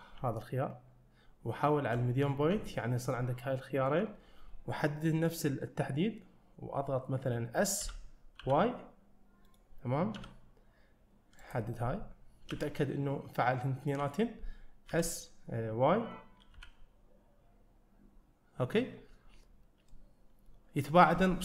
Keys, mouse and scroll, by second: 2.6 ., 7.0-7.8 scroll down 1, 7.8 s, 12.6 ., 14.9 s.